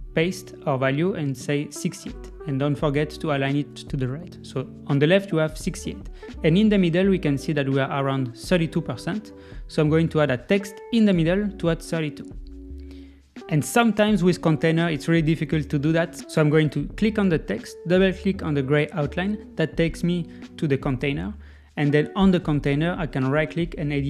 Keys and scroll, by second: 1.2 super+v, 1.6 Left, 2.2 Right.